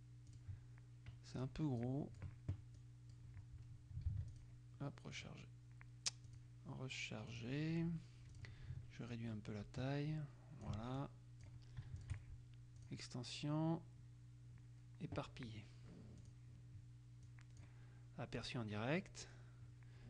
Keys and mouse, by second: 0.5 click, 1.6 click, 3.0 click, 4.3 ctrl+s, 4.5 ctrl+click, 5.3 click, 6.5 click, 7.5 click, 8.5 click, 9.3-11.3 ctrl+drag, 12.2 shift+click, 13.0 click, 16.4 click, 17.8 click, 18.5 click.